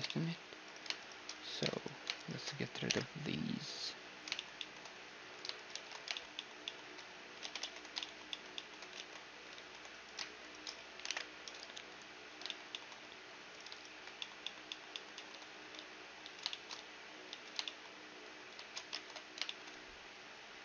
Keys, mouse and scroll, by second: 0.2-1.8 drag, 1.8-3.6 right drag, 2.5 alt+m, 4.0 middle click, 4.9-6.0 drag, 4.9-7.0 right drag, 5.3 shift+r, 6.1 click, 6.3-10.7 middle drag, 7.0 ctrl+z, 7.2 ctrl+z, 8.6 ctrl+z, 9.1 ctrl+z, 9.6-11.8 right drag, 10.7 alt+m, 12.1-13.1 middle drag, 13.1-15.1 drag, 13.1-15.1 right drag, 13.6 shift+r, 15.1-20.2 middle drag, 15.3 z, 15.8 z, 16.3 z, 16.9 z, 18.6 ctrl+Tab.